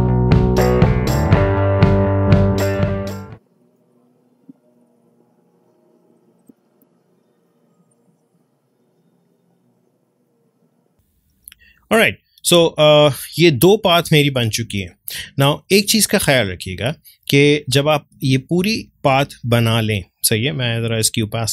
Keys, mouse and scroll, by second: 0.0 ctrl+click, 0.6 ctrl+z, 0.8-4.4 drag, 4.4 ctrl+z, 4.8-6.4 drag, 6.4 space, 7.1-10.8 drag, 11.0 ctrl+space, 11.3-21.5 ctrl+drag.